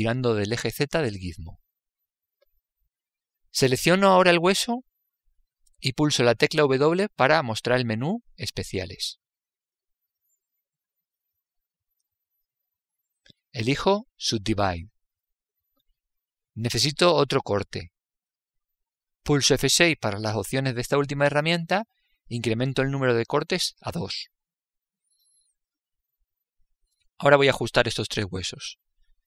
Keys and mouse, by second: 0.7 click, 5.3 right click, 7.8 w, 20.1 F6.